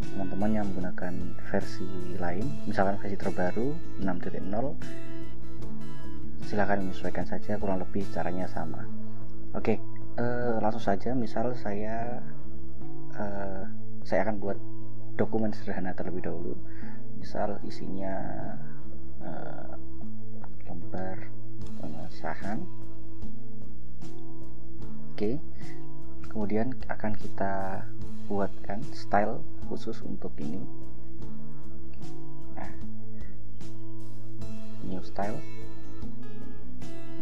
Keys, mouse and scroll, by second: 14.7 ctrl+e, 19.1 Caps_Lock, 20.0-23.2 typing, 28.3-29.4 drag, 31.6 click, 33.9 click, 35.0 click.